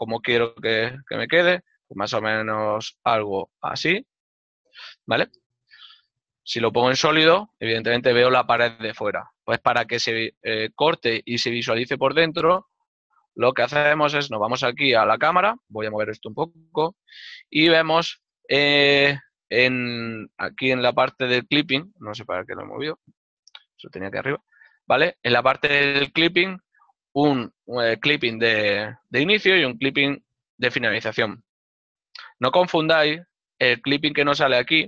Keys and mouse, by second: 7.6 click, 14.6 middle click, 33.1 n.